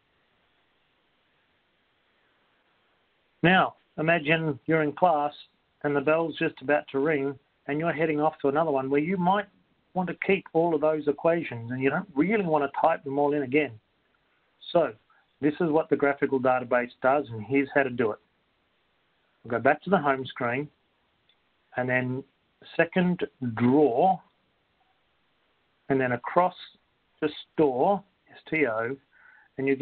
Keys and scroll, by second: 27.4 Right.